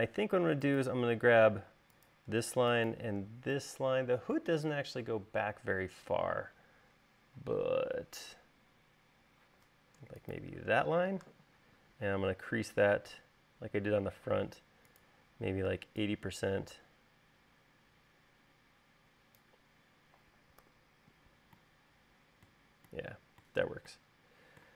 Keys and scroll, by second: 2.0 space, 20.9 u.